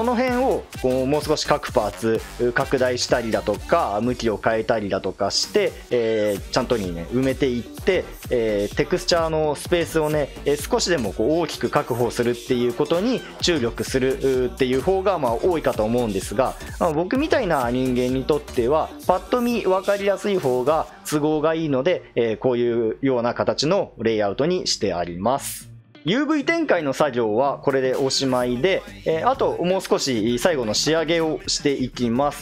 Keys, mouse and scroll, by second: 25.8 ctrl+z.